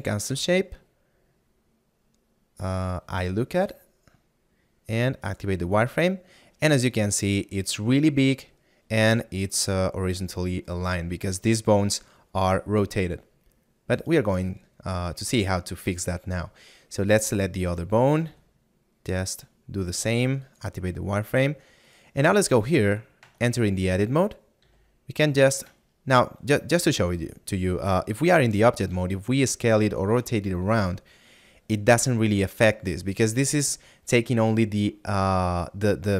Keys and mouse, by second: 19.3 click, 30.4 r.